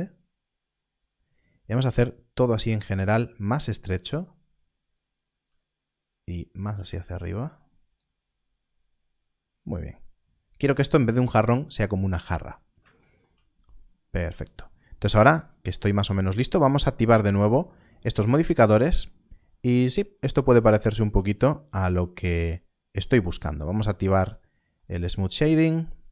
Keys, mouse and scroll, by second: 1.5-2.5 scroll down 1, 3.5 click, 6.5 click, 7.8 g, 8.3 scroll up 1, 9.7 scroll down 1, 12.1 scroll up 1, 13.5 scroll up 1, 14.0 scroll down 1, 16.2 click, 23.9 click.